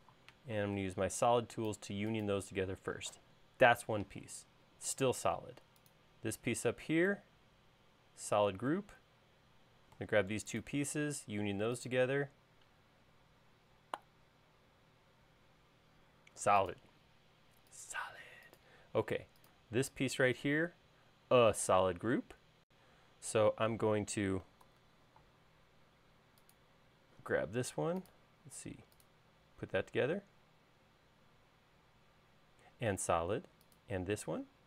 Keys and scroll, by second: 0.6 super+s, 25.6 super+s.